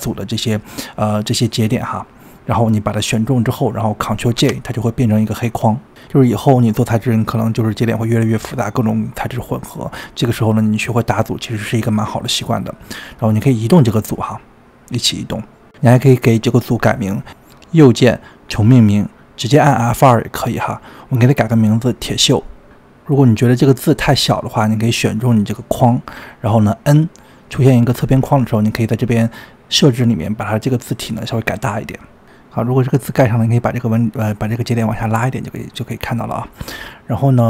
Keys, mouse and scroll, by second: 1.2 click, 4.3 ctrl+j, 5.7-6.4 scroll down 3, 6.9 shift+middle click, 7.6 drag, 8.3 click, 8.7 click, 9.4-10.5 middle drag, 10.5 click, 11.0 click, 11.8 drag, 12.5 click, 13.4 click, 14.0 click, 17.7-23.7 right drag, 23.7 KP_Enter, 24.6 click, 24.9-25.6 scroll up 9, 25.6 click, 26.0-26.6 scroll down 9, 28.0 n, 29.4 click, 30.7-33.6 drag, 35.9 middle click, 36.3-36.8 scroll down 5.